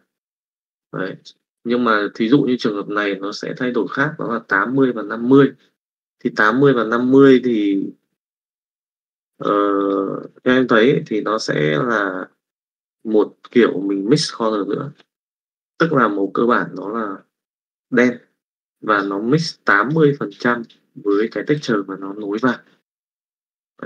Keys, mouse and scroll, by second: 12.7 click.